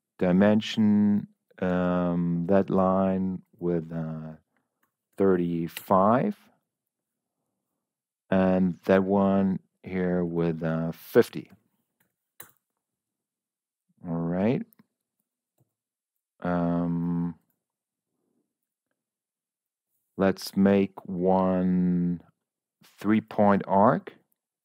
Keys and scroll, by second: 5.0 5, 5.7 Return, 11.9 0, 12.3 Return, 15.5 Escape.